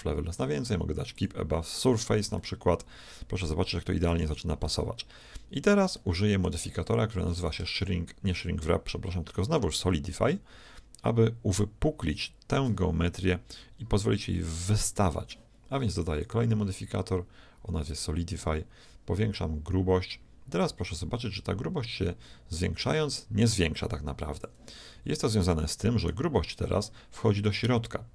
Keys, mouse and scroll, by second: 3.1-4.2 middle drag, 4.2 z, 4.6-7.5 middle drag, 7.5-9.2 drag, 16.2-18.1 drag, 19.3-21.1 drag, 21.2 click, 25.0 z, 25.5-27.4 middle drag, 27.4-28.1 drag.